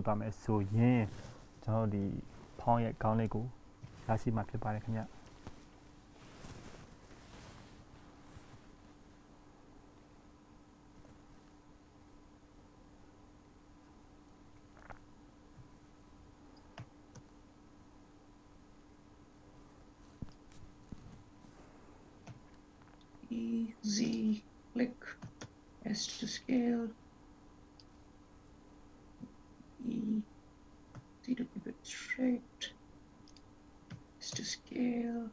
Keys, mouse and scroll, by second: 5.8 shift+e, 12.4 ctrl+s, 13.6 ctrl+s, 14.3 ctrl+z, 19.2 shift+s, 25.7 shift+s, 34.7 shift+s.